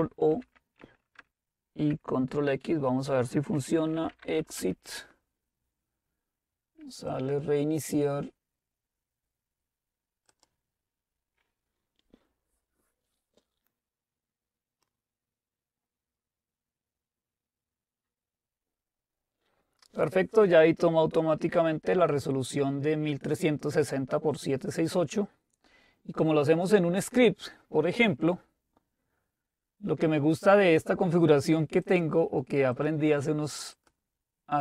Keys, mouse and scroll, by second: 0.3 ctrl+o, 1.2 Return, 2.3 ctrl+x, 3.6-4.9 typing, 7.1 click, 10.3-11.3 drag, 31.9-34.6 drag.